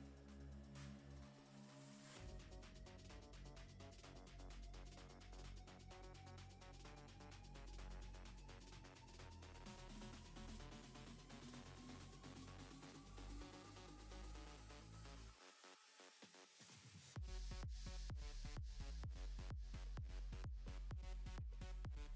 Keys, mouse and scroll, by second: 0.5 middle click, 1.0 scroll up 5, 1.3 shift+middle click, 1.7-2.3 scroll up 6, 2.3 middle click, 2.8 click, 3.5 KP_0, 4.1 scroll up 2, 4.4 g, 5.6 a, 5.7 a, 6.1 ctrl+r, 6.9 click, 7.1 g, 7.7 click, 7.9 g, 9.4 click, 9.7 g, 11.5 click, 11.7 Tab, 12.3 Tab, 12.6 click, 12.8 g, 13.8 click, 13.9 g, 15.4 click, 15.8 Tab, 16.1 z, 16.6 middle drag, 16.9-17.5 scroll up 4, 17.5 z, 18.0 shift+middle drag, 18.1 scroll up 4, 18.4 Tab, 18.5-20.0 middle drag, 20.0-20.6 scroll up 3, 20.1 middle click, 20.7-21.9 middle drag.